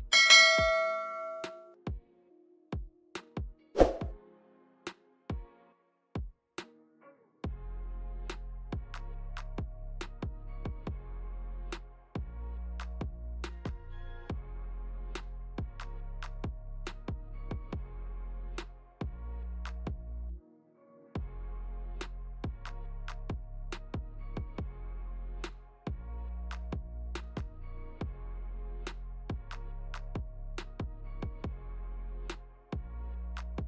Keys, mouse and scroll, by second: 0.1 middle click, 0.4 shift+scroll up 1, 0.7 shift+middle click, 0.8 middle click, 1.9 click, 4.6 middle click, 5.0 middle click, 5.4 scroll down 2, 5.7 middle click, 7.5 middle click, 9.7 scroll up 3, 10.0 shift+middle click, 10.2 shift+middle click, 11.0 g, 12.6 middle click, 15.2 g, 19.3 click, 22.5 Tab, 23.5 click, 24.3 middle click, 26.4 click, 27.7 click, 32.2 middle click, 33.3 click.